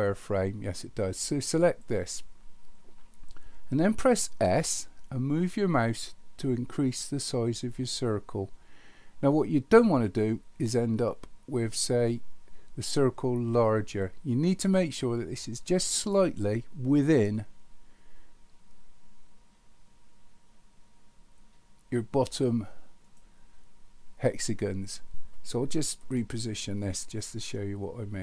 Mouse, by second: 1.6 click, 26.1-26.8 middle drag.